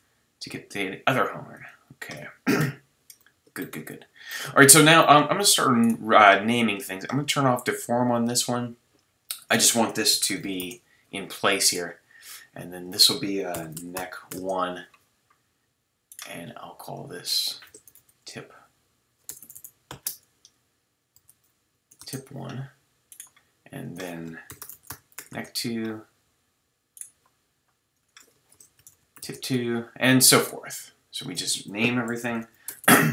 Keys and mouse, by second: 0.5 g, 1.0 click, 2.6 KP_3, 5.8 click, 11.0-12.8 drag, 16.1-16.9 drag, 16.9-18.6 middle drag, 18.6 click, 19.4 BackSpace, 19.5 BackSpace, 23.1 click, 25.5-27.9 drag, 29.6-31.2 drag, 32.8 click, 32.8-33.1 typing.